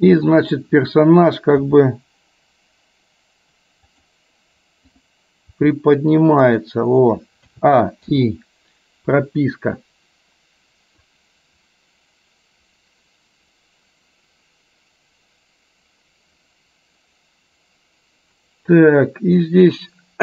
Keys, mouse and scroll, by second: 0.5 click, 1.7 r, 5.0 click, 5.6 r, 7.6 a, 8.2 i, 11.2-20.2 drag.